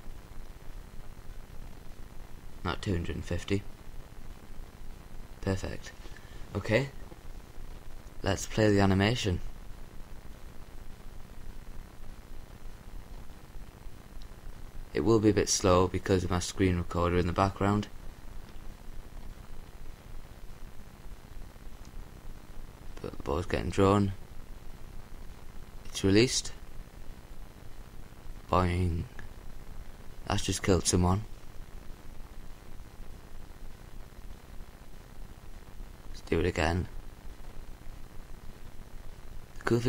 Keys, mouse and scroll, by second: 0.9-2.4 drag, 6.3-7.8 drag, 8.1-9.3 drag, 12.6-14.1 drag, 33.9-35.4 drag, 37.8-39.6 middle drag.